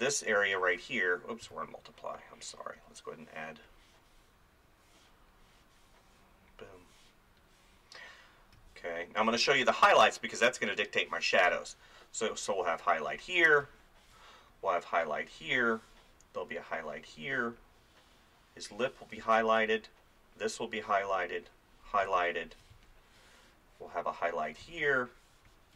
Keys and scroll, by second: 1.4 ctrl+z, 8.6 space, 9.8 [, 13.6 space, 19.2 space, 22.1 space.